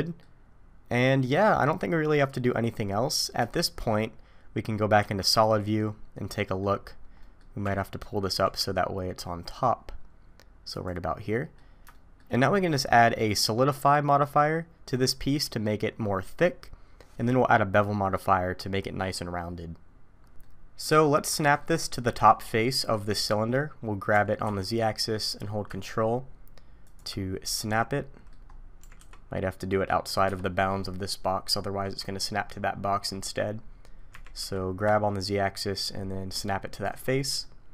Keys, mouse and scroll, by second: 1.0 middle click, 2.9 scroll down 2, 3.5 shift+middle click, 5.0 z, 5.5 middle click, 6.8-7.7 scroll down 2, 7.2 middle click, 7.7 Tab, 8.3 g, 11.3 middle click, 11.9 shift+middle click, 12.3-12.9 scroll up 3, 12.9 middle click, 20.4 middle click, 21.4 shift+middle click, 24.1 g, 27.2-27.9 scroll down 7, 27.7 middle click, 28.5-28.8 scroll up 3, 28.8 g, 30.5-31.5 scroll down 5, 31.5 scroll down 2, 33.1-33.7 scroll up 7, 34.1 g, 37.4 middle click.